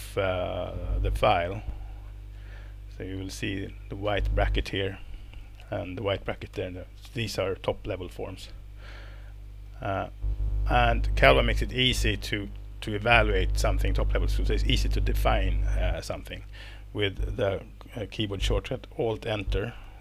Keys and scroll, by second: 5.6 alt+Right, 6.5 alt+Right, 7.6 alt+Left, 8.1 alt+Left, 8.5 alt+Left, 9.7 alt+Right.